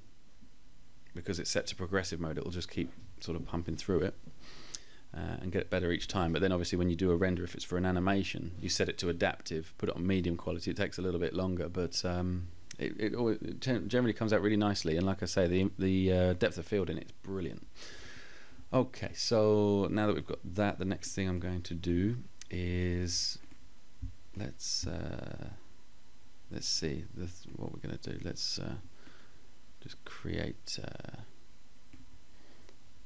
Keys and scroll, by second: 9.4 Page_Up, 10.0 Page_Up.